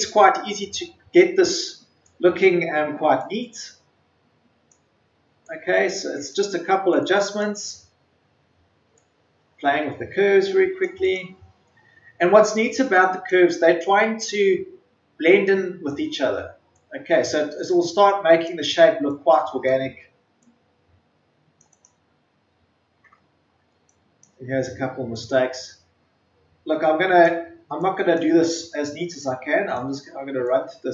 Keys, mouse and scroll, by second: 0.5-1.6 ctrl+scroll up 1, 3.1-11.0 drag, 11.4-12.0 scroll down 2, 12.4-12.7 scroll up 1, 12.9-21.6 drag, 22.1-22.5 ctrl+scroll down 1, 23.2-24.0 ctrl+scroll up 1, 24.0-30.9 drag.